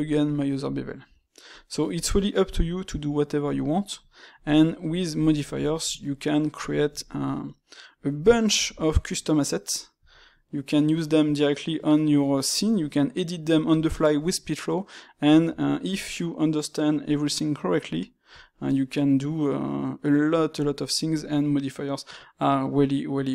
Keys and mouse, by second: 3.4-5.1 middle drag, 5.4-8.5 ctrl+shift+middle drag, 8.5 shift+q, 13.7 space, 17.4-23.3 middle drag.